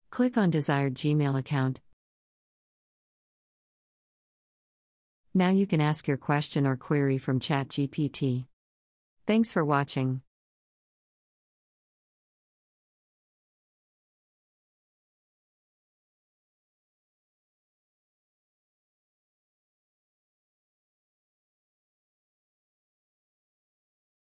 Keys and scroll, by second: 13.3 space, 18.1-22.4 typing, 23.0 Return.